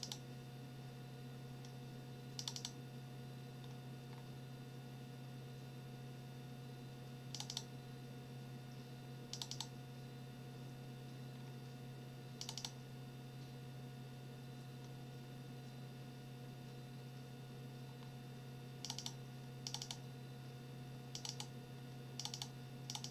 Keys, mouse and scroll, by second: 2.4 click, 4.1 scroll down 1, 7.3 click, 9.3 click, 11.3-11.6 scroll down 2, 12.4 click, 17.8-18.2 scroll down 1, 18.8 click, 19.7 click, 21.1 click, 22.2 click, 22.9 click.